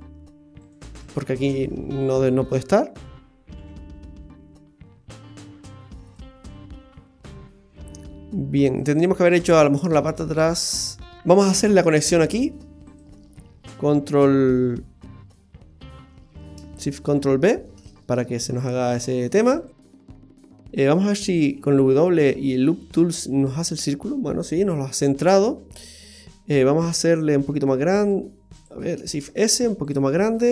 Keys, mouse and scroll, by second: 1.6-2.3 scroll down 3, 1.9 middle click, 3.6 g, 6.4 middle click, 8.9-9.7 scroll up 6, 9.7 shift+middle click, 10.8-11.2 scroll up 2, 11.5-12.5 scroll up 2, 11.9 shift+middle click, 12.9 right click, 17.2 ctrl+shift+b, 21.5 w, 24.4-24.7 scroll down 1, 24.8 middle click, 27.5 s, 29.1 shift+s, 30.0 s.